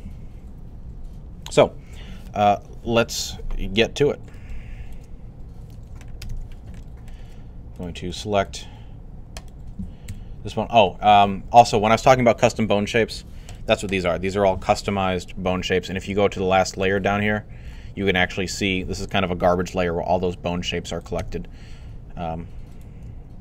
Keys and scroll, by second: 9.9 super+3.